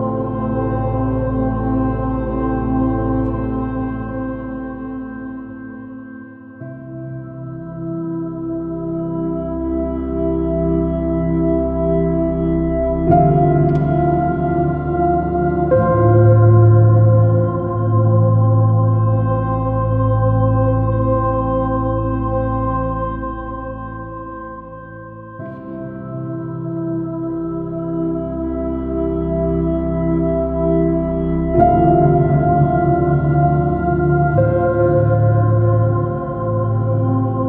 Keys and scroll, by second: 2.8 super+-, 4.3 super+i, 5.7 super+-, 6.3 super++, 7.5 j, 11.8 space, 12.6 super+-, 13.7 super+i, 13.9 super++, 14.1 super+space, 25.2 space, 33.3 s.